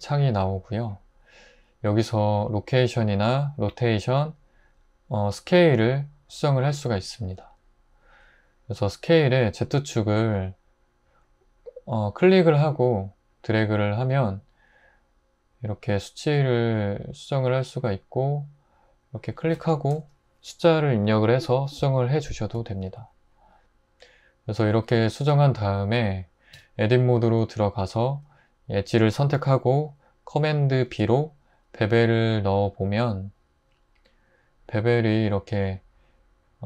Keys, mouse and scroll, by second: 19.8 2, 19.9 Return, 26.5 Tab, 30.9 super+b.